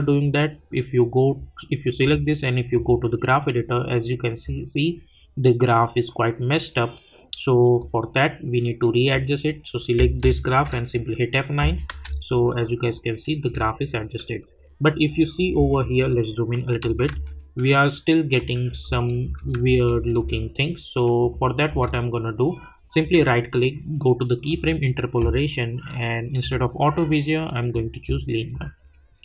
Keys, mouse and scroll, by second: 4.3 click, 7.8-10.5 drag, 10.5 F9, 14.9 click, 16.0-16.7 alt+scroll up 1, 18.4 click, 18.8 space, 21.2 click, 21.7 space, 23.0 right click, 24.5 click.